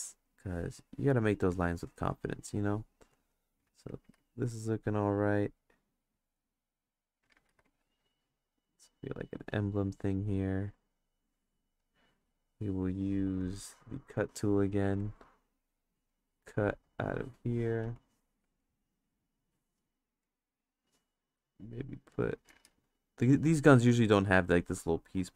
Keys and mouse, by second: 1.3 click, 2.3 click, 3.1 click, 3.6 ctrl+z, 4.3 click, 5.3 click, 6.0 click, 7.5 ctrl+z, 7.7 click, 8.6-9.8 drag, 10.3-11.8 drag, 15.1 click, 15.9 click, 17.1 click, 18.0 click, 18.9 click, 20.2 click, 21.5 click, 22.7 ctrl+z, 22.8 click, 23.7 ctrl+z, 23.8 click, 25.2 click.